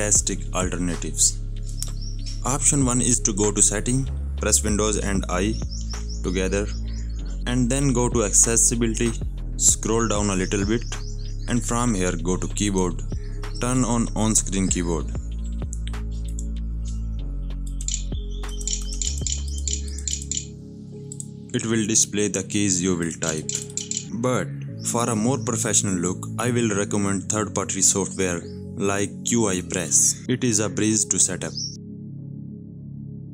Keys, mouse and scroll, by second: 1.1-2.3 alt+scroll down 1, 2.3 h, 5.8 super+i, 8.5 click, 10.1-12.0 scroll down 2, 12.6 click, 16.2 click, 17.4-20.5 typing, 20.1 click, 21.1 click, 23.0 i, 23.2 click, 23.5 g, 24.0 click, 24.5 click, 28.9 right click, 32.0 click, 33.1 right click.